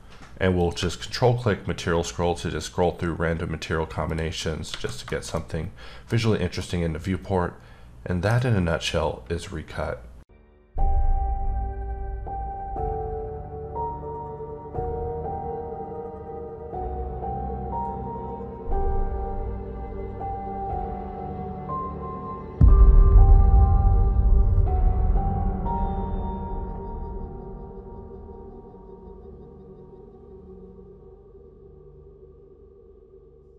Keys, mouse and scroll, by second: 0.6 click, 1.0-2.6 scroll up 6, 2.6-3.6 scroll up 2, 3.6-4.1 scroll up 1, 4.1 click, 4.4 middle click, 4.7 alt+a, 5.6-6.3 middle drag, 6.3-6.6 scroll up 1.